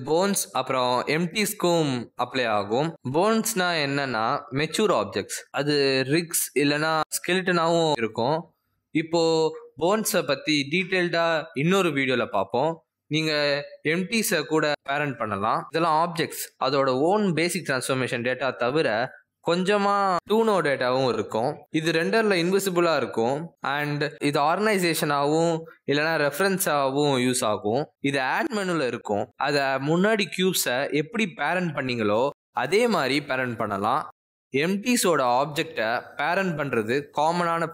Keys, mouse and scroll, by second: 7.9-8.7 scroll up 1, 8.7-9.3 scroll down 2, 11.2 scroll down 1, 11.5 shift+middle click, 23.8 s, 24.3 r, 26.3-28.8 typing, 28.6 click, 29.6 click, 31.1 click, 31.7-32.0 scroll down 2, 32.6 click, 33.6 click, 34.1 scroll down 1, 35.0-35.6 scroll down 1, 37.0 click.